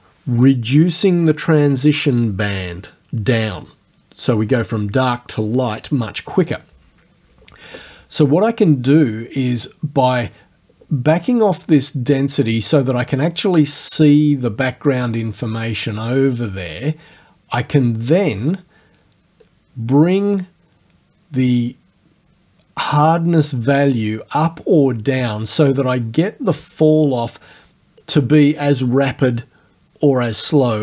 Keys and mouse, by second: 16.3 click, 19.5-28.2 drag.